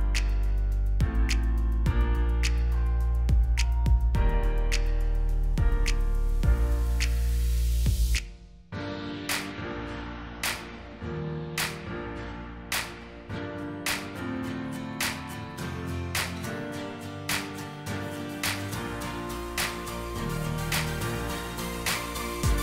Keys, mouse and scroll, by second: 4.0 Right, 5.2 Right, 5.6 Right, 5.9 Right, 6.1 Right, 6.6 Right, 7.1 Right, 9.0-9.3 alt+scroll down 1, 11.3-11.7 alt+scroll up 1, 12.2 alt+z, 12.6-13.5 alt+scroll up 1, 14.8-17.7 alt+scroll up 2, 17.7 Right, 17.8 Right, 18.1 Right, 18.3 Right, 18.5 Right.